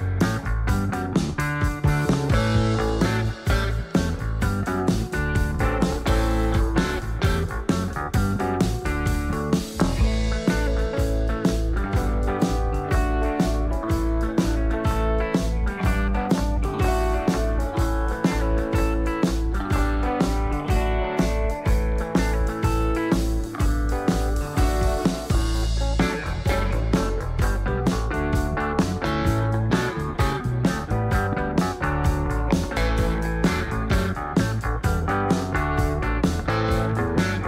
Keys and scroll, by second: 0.0-0.8 typing, 9.3 Delete, 24.7 ctrl+a, 25.1-26.7 typing, 28.0 Tab, 28.4-28.8 typing, 29.2 Return, 31.1-31.8 typing.